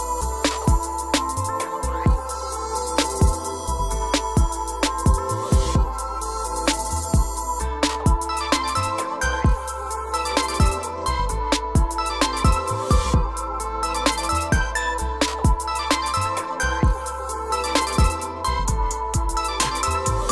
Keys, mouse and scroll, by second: 0.9 e, 1.4 click, 1.7-2.7 scroll, 2.7 scroll down 10, 2.7 o, 3.7 click, 4.0 scroll up 2, 4.3 e, 4.8 click, 6.4 ctrl+z, 7.1 click, 7.3 click, 7.5 click, 7.6 click, 8.1 right click, 9.4 click, 10.1 click, 10.2 click, 10.4 click, 10.8 right click, 12.1 click, 13.3 r, 15.7 Right, 16.3 click, 16.8 scroll down 1, 16.9-17.8 scroll up 3, 17.9 scroll up 1.